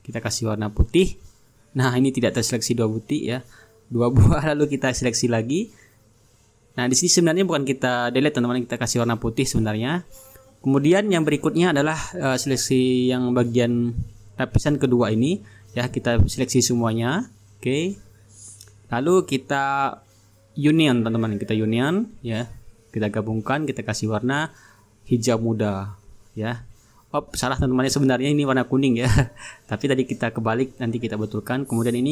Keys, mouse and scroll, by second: 1.0-2.1 drag, 3.3 Delete, 4.5-4.9 ctrl+scroll up 2, 4.9-5.9 ctrl+drag, 6.0 Delete, 6.8-7.9 drag, 7.2 Delete, 7.9-8.5 ctrl+scroll down 2, 8.5-9.2 ctrl+scroll up 3, 11.4-14.3 drag, 14.3-15.0 ctrl+scroll up 3, 15.0-19.6 drag, 20.3-22.2 drag, 22.5-23.6 ctrl+scroll down 3, 24.2-26.2 drag, 26.3-27.8 drag, 28.2-32.1 drag.